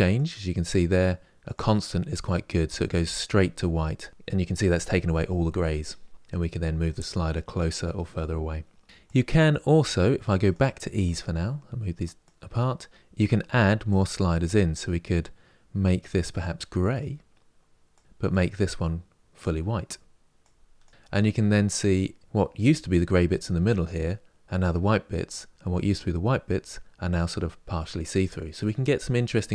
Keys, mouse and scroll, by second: 10.7-13.7 drag, 16.1 click, 18.1 click, 20.1 click.